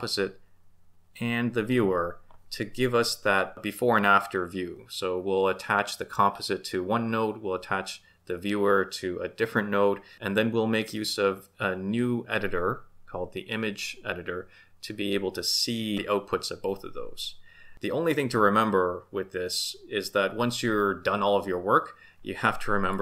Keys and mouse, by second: 22.9-23.0 drag.